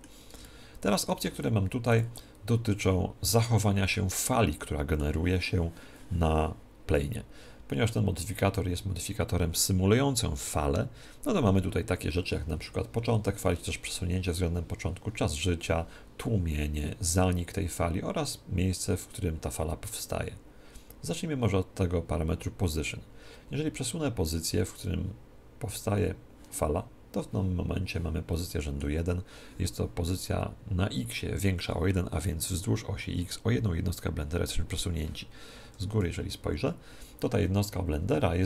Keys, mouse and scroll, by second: 1.9 click, 3.7-6.1 middle drag, 24.3 click, 28.5-30.3 middle drag, 35.5 KP_1, 35.9 KP_7, 37.5-38.4 middle drag.